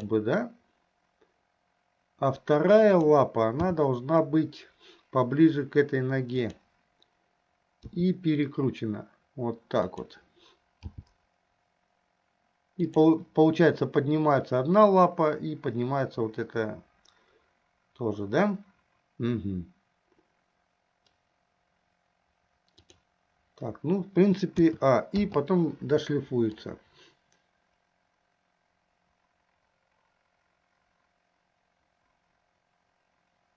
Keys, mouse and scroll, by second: 3.0 click, 3.9 g, 8.2 r, 11.3 g, 22.9 click, 24.8 a, 25.6 i, 27.0-33.5 drag.